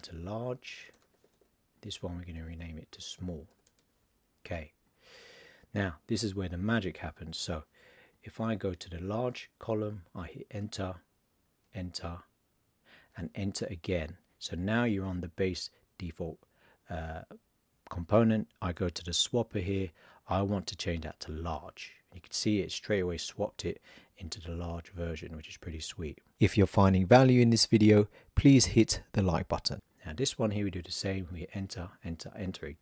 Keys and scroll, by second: 2.3 shift+s.